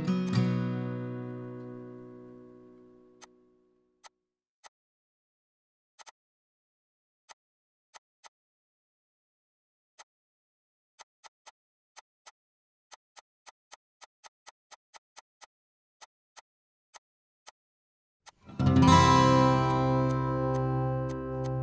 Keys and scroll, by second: 0.4 Escape, 2.4 h, 3.7 ctrl+h, 4.1 ctrl+h, 9.4 Down, 9.6 Down, 9.7 Down.